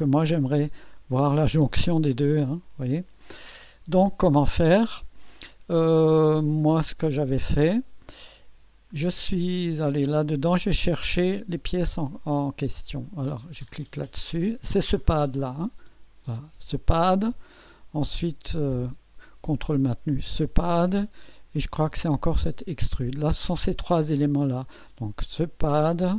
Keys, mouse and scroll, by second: 3.5-4.1 scroll down 2, 5.3 scroll up 1, 6.5-7.5 middle drag, 8.5 scroll down 1, 8.9 scroll up 1, 13.8 click, 15.4 click, 15.8 space, 17.2 scroll down 2, 20.1 ctrl+click, 22.4 ctrl+click, 25.3 click.